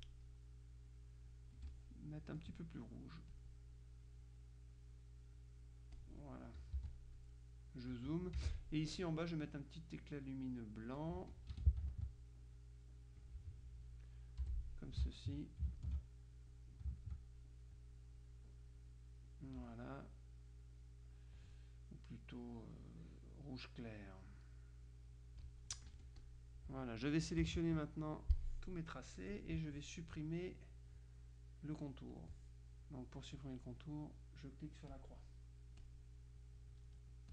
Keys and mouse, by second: 1.6 F1, 1.8-3.0 drag, 3.4 click, 4.8 click, 6.0 click, 6.8 z, 7.0 click, 8.4 F6, 9.6-11.6 drag, 11.6 F2, 12.0 ctrl+click, 12.7-13.8 drag, 14.6 Delete, 15.2 ctrl+click, 15.9 ctrl+alt+click, 16.6-17.7 drag, 18.2 click, 23.6 click, 25.0-26.1 drag, 26.0 F1, 26.3 click, 27.5 KP_Subtract, 28.4-29.6 drag, 32.2 click, 33.4 click, 35.0 click, 35.9 click.